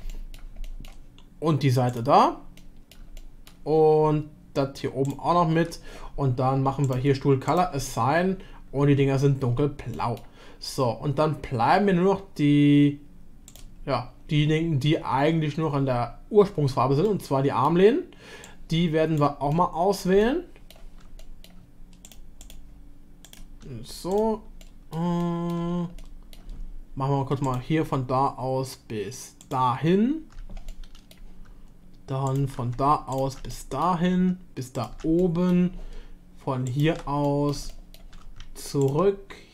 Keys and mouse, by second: 0.1 middle drag, 0.6 shift+middle drag, 1.9 shift+click, 2.6-2.9 middle drag, 3.2-3.5 shift+middle drag, 6.8 click, 9.9 middle click, 13.4 click, 17.1 middle click, 19.5 middle click, 20.2 shift+middle click, 21.2 middle click, 24.6-25.1 middle drag, 25.2-25.6 shift+middle drag, 26.0-26.5 middle drag, 27.5-28.1 drag, 30.7 middle click, 32.3 shift+drag, 33.6 middle click, 35.2 middle drag, 37.2 middle drag, 37.7 shift+middle drag, 38.8 ctrl+click.